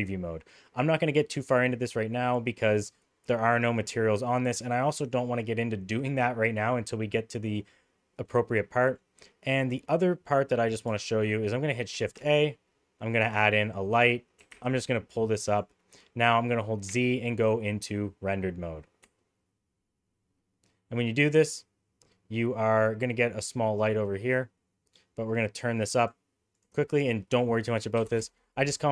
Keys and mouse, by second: 8.3 middle click, 12.0 shift+a, 14.4 g, 16.9 z, 23.8 click, 26.1 click, 26.6-28.6 drag.